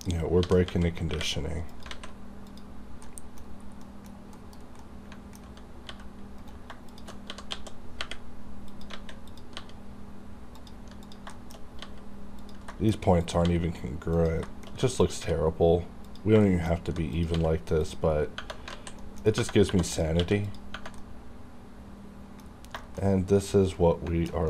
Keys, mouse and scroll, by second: 0.4 g, 0.6 x, 1.6 click, 1.9 alt+a, 2.5 click, 3.0 middle click, 3.6 scroll down 1, 3.8 middle click, 4.3 KP_Decimal, 4.8 middle click, 5.4 alt+scroll up 2, 5.9 g, 6.4 right click, 6.9 shift+click, 7.2 g, 7.5 x, 8.6 click, 8.9 alt+a, 9.3 click, 9.6 g, 10.6 click, 11.3 shift+middle click, 11.8 g, 12.4 click, 12.7 shift+middle click, 13.0 shift+scroll down 1, 13.2 click, 13.2 click, 13.4 g, 14.1 click, 14.5 shift+middle click, 14.7 shift+scroll up 1, 15.0 click, 15.2 g, 16.1 click, 16.4 shift+middle click, 16.7-17.1 scroll down 1, 17.1 click, 17.3 g, 17.8 click, 17.8 click, 18.0-18.4 scroll down 1, 18.7 alt+z, 19.0 middle click, 19.2 scroll up 1, 19.7 2, 19.9 click, 19.9 click, 20.2 q, 20.3 click, 20.5 click, 21.0-22.4 middle drag, 22.4-22.7 scroll down 1, 22.8 shift+middle click, 23.1-23.4 scroll down 1, 23.4-24.4 middle drag.